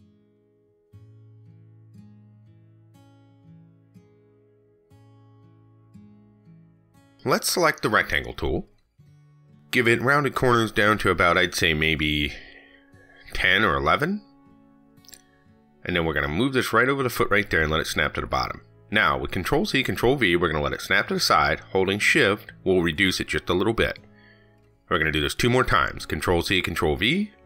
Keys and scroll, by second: 19.2 ctrl+c, 19.4 ctrl+v, 26.8 ctrl+c, 27.0 ctrl+v.